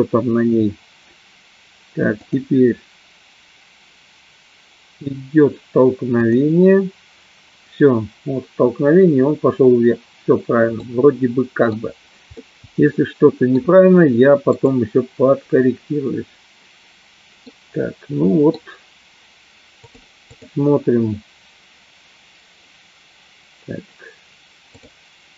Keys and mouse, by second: 0.4 click, 2.8 click, 6.8 click, 10.9 middle click, 12.5-13.7 middle drag, 17.6-18.6 middle drag, 20.4 click, 24.9 click.